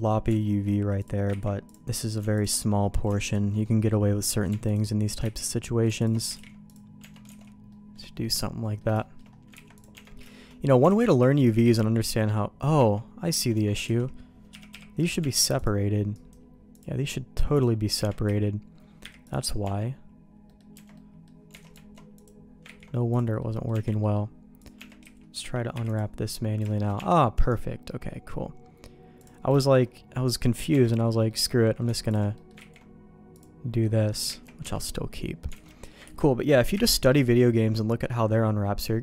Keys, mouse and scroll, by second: 1.0 click, 1.5 ctrl+e, 2.4 alt+click, 3.6 middle click, 4.7 alt+click, 5.2 ctrl+x, 6.0 alt+click, 6.3 ctrl+e, 7.0 Tab, 7.3 alt+a, 7.7 middle click, 8.6 middle click, 9.0 shift+middle click, 9.6 ctrl+s, 9.8 click, 9.9 Tab, 10.3 shift+middle click, 10.9 alt+a, 11.6 a, 12.8 Tab, 13.5 Tab, 13.9 alt+a, 14.5 l, 14.7 p, 15.2 Tab, 15.6 click, 16.2-17.7 right drag, 18.0 Tab, 18.3 a, 19.0 u, 19.6 Tab, 20.5 middle click, 20.7 Tab, 20.9 middle click, 21.6 alt+a, 22.2 click, 22.6 ctrl+e, 23.4 middle click, 23.7 Tab, 24.0 middle click, 24.6 click, 24.8 Tab, 25.0 a, 25.7 u, 26.7 shift+middle click, 27.0 Tab, 27.4-29.2 right drag, 29.6 middle click, 30.7 Tab, 31.3 middle click, 32.1 alt+click, 32.4 middle click, 32.8 ctrl+e, 33.8 middle click, 34.4 ctrl+z, 34.6 Tab, 35.6 alt+a, 35.6 middle click, 36.1 ctrl+s, 36.8 KP_Divide, 37.9 middle click.